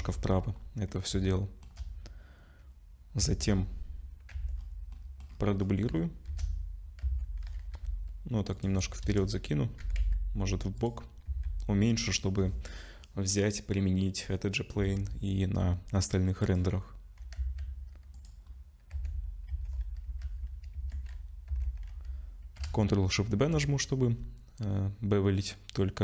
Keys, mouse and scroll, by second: 0.0 KP_0, 1.2 shift+middle click, 3.2 a, 4.5 Tab, 4.5-6.3 scroll down 19, 4.9 middle click, 6.3 shift+d, 9.0 KP_0, 9.8 g, 11.3 s, 15.5-16.4 scroll up 2, 16.4 click, 16.4 scroll up 1, 17.3 z, 18.1 click, 18.5 scroll up 2, 18.9 Tab, 19.5 a, 20.0 z, 21.5 1, 23.3 ctrl+shift+b.